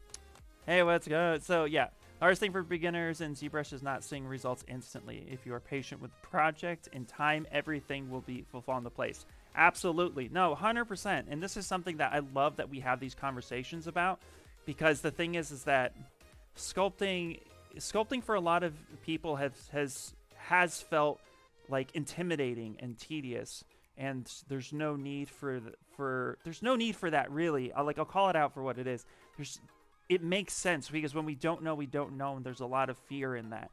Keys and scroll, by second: 15.4 s, 24.1 s, 30.9-31.9 typing.